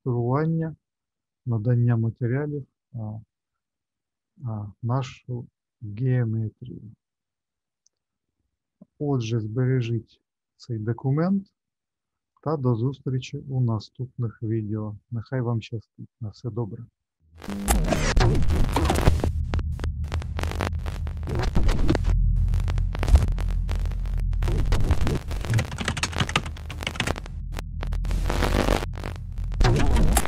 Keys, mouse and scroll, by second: 5.9 middle click, 10.7 click.